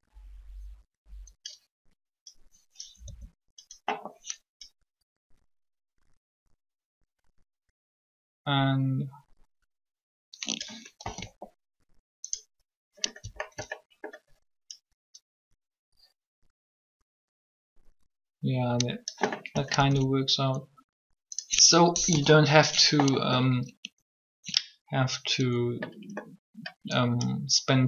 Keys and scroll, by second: 3.0 r, 11.0 alt+a, 19.7 alt+a, 21.9 3.